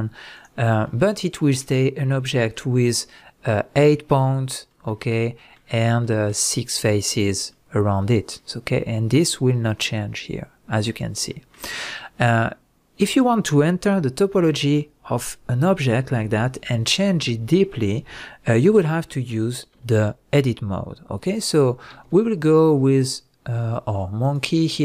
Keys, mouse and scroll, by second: 0.4 click, 0.6 scroll down 1, 0.8-7.9 middle drag, 16.2 x, 21.9 shift+a, 24.7 scroll down 1.